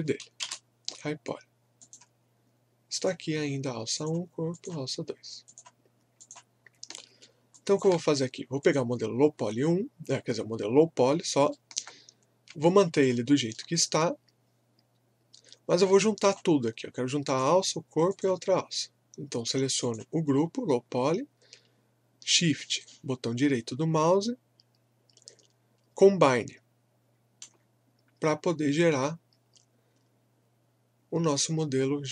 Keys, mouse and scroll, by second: 0.0-0.2 typing, 0.4 Return, 1.8 click, 7.0 alt+middle click, 7.6 alt+click, 11.1 scroll up 1, 11.5 alt+middle click, 12.6 alt+click, 13.4 alt+middle click, 13.9-16.2 alt+drag, 22.9-30.2 shift+right drag.